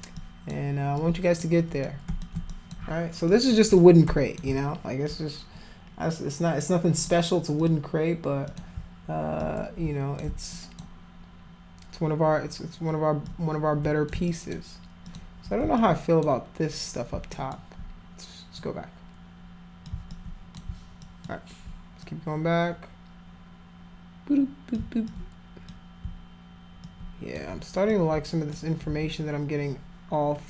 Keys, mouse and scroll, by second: 0.2 alt+click, 1.0 alt+click, 1.8 shift+click, 2.5 alt+click, 3.3 alt+click, 3.7 click, 7.0 click, 7.6 click, 8.5 click, 9.4 click, 10.5 alt+click, 13.3 click, 14.2 alt+click, 15.0 alt+click, 15.7 alt+click, 17.3 alt+click, 18.6-19.9 drag, 20.1 alt+click, 21.0 alt+click, 22.0-24.7 drag, 25.1 alt+click, 26.8 alt+click, 27.9 shift+click.